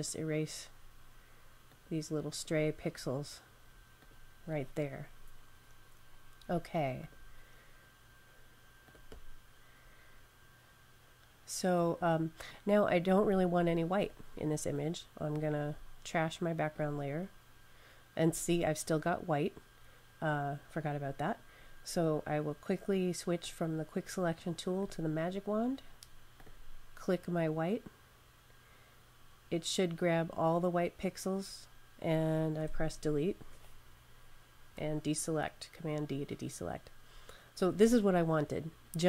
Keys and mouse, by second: 6.9 click, 13.8 click, 23.3 click, 26.2 click, 34.6 super+d.